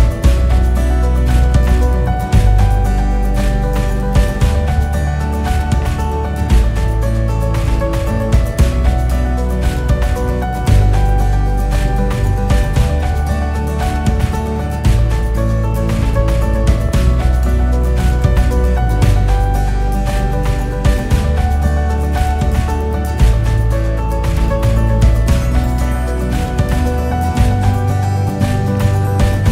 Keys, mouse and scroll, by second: 1.3 s, 2.3 click, 2.9 e, 5.2 s, 6.7 drag, 7.0-7.5 scroll down 3, 7.5-11.0 KP_6, 11.6 Tab, 11.9 drag, 12.2-12.8 scroll up 1, 12.8 scroll down 1, 13.1-13.7 scroll up 1, 13.7 KP_4, 13.7 KP_4, 13.9 KP_4, 14.0-17.1 KP_4, 17.7 click, 18.4 click, 19.2-20.0 KP_4, 20.7 KP_6, 20.9 KP_6, 21.0 KP_6, 21.5 click, 22.2 e, 24.8 s, 25.5 s, 26.9-28.3 typing, 28.7 click, 29.4 e.